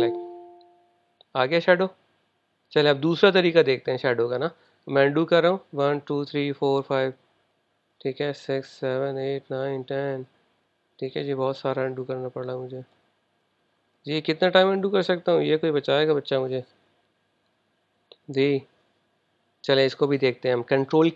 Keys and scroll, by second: 5.7 super+z, 6.0 super+z, 6.3 super+z.